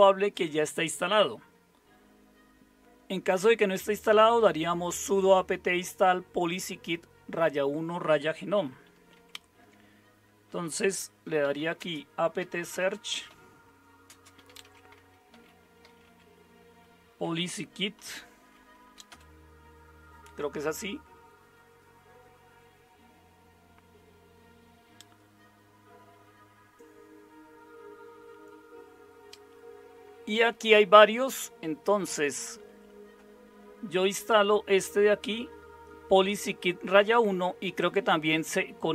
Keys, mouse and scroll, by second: 9.1 super+0, 11.0-17.2 typing, 18.8-19.6 typing.